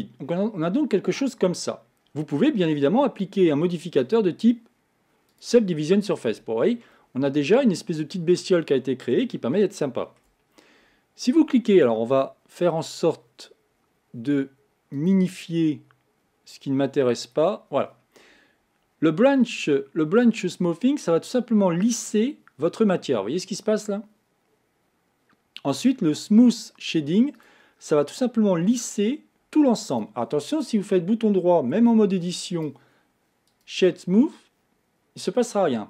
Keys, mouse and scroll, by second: 2.4-4.0 scroll up 1, 4.0-6.3 drag, 6.3 scroll down 2, 6.9-12.7 middle drag, 14.9 click, 17.2 click, 20.2-23.2 drag, 27.4 click, 29.9 click, 31.8 Tab, 32.5-35.8 right drag.